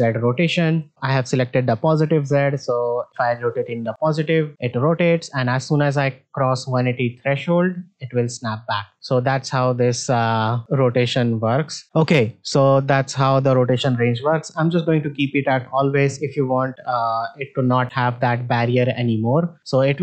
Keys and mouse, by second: 0.7 click, 3.1 r, 11.0-11.8 drag, 13.6-15.6 drag, 17.2-17.5 middle drag, 17.8 r.